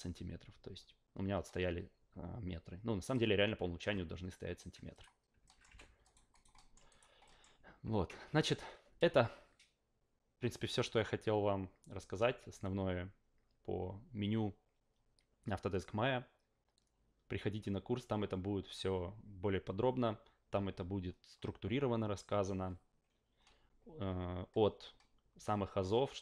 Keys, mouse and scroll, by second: 3.0 click, 4.9 click, 5.4 alt+middle drag, 5.7 f, 6.0 alt+right click, 6.3 alt+right click, 6.5 alt+middle drag, 6.9 alt+right click, 7.2 alt+middle drag.